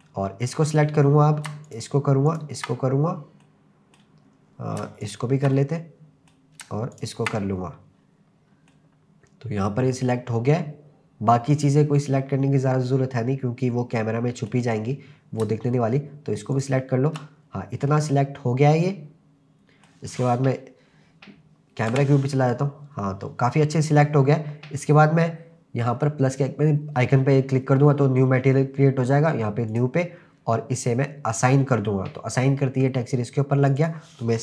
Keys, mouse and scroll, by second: 0.0 middle click, 1.1-1.5 scroll up 1, 1.7 shift+click, 2.3 shift+click, 2.9-3.4 scroll up 2, 3.4 middle click, 4.3-4.8 scroll up 2, 5.0 shift+click, 5.5 middle click, 6.9 shift+click, 7.6-8.1 scroll down 2, 8.6 scroll down 1, 8.7-14.5 middle drag, 14.9-15.4 scroll up 3, 16.5 shift+click, 17.4-18.1 scroll down 3, 17.9-20.5 middle drag, 21.9 KP_0, 26.3 click, 29.7 click, 31.3 click, 33.7 click, 33.8-34.4 drag.